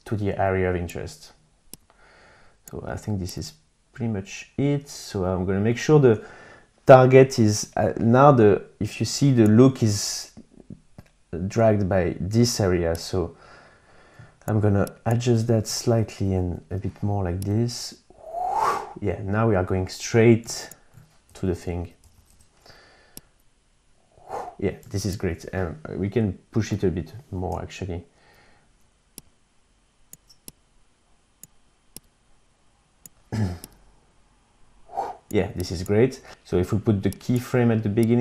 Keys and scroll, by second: 15.7 shift+Up, 16.1 shift+Right, 21.2 Up.